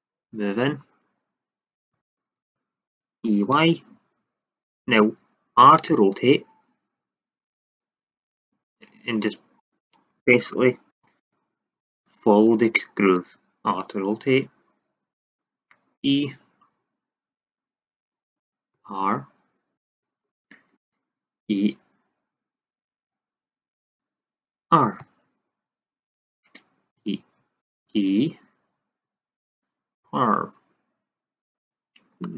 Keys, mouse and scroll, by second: 1.4 click, 3.2 e, 4.7-5.8 drag, 5.8 r, 7.6-9.5 drag, 10.2-10.9 middle drag, 10.9 e, 13.6 r, 15.2 click, 15.9 e, 18.3 click, 18.7 r, 20.3-21.3 middle drag, 21.3 e, 23.8-24.6 drag, 24.9 r, 25.5 click, 26.3-26.9 drag, 26.9 r, 27.8 e, 29.9 r, 32.2 drag.